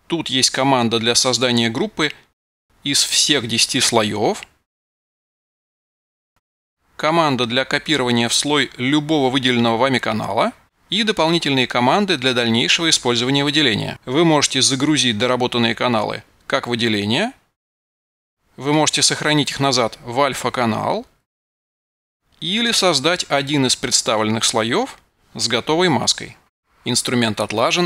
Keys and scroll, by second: 16.6 super+d.